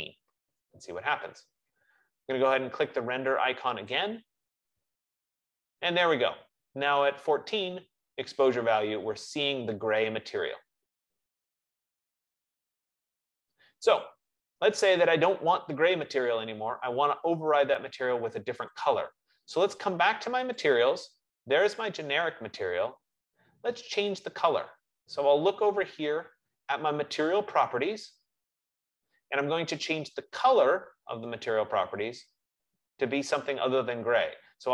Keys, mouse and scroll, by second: 4.2 click, 19.4 click, 20.9 click.